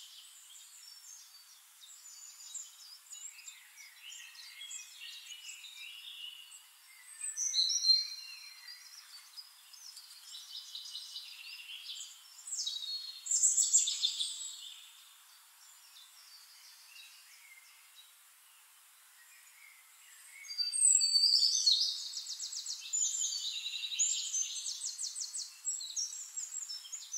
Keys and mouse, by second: 1.2 click, 2.3-3.4 drag, 3.5 ctrl+z, 5.7-9.7 drag, 11.8 click, 12.8 click, 14.3 click, 14.8 click, 15.6 ctrl+d, 16.2 shift+click, 17.0-17.9 drag, 19.1 click, 19.4 click, 20.0 click, 20.8 click, 21.6-25.3 drag, 26.3 click.